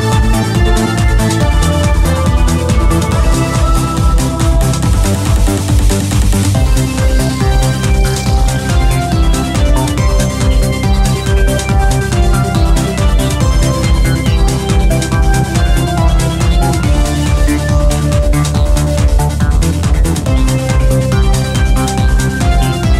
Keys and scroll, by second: 3.7 q, 6.5 g, 7.0 g, 13.4-17.4 typing, 19.3-22.9 typing.